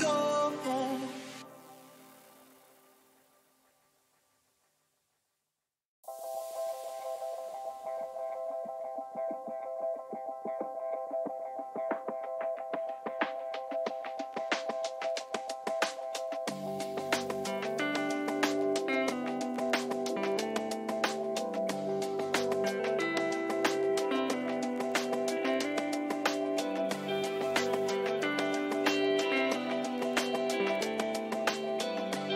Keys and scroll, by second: 9.2 ctrl+t, 13.8 Return, 14.4 Down, 31.1 ctrl+-.